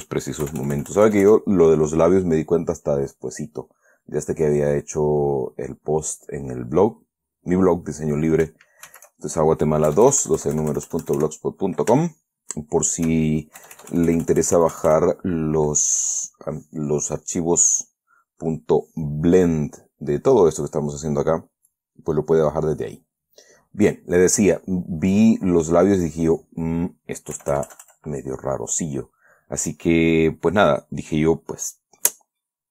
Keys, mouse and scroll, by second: 0.8 KP_Add, 1.8-8.1 middle drag, 9.2 shift+c, 10.2 KP_Add, 12.3-15.8 shift+middle drag, 13.9 KP_Add, 18.2 click, 20.0 click, 22.0 click, 23.6 click, 25.5 click, 26.4 click, 27.7 KP_Add, 28.6 middle click, 29.6 middle click.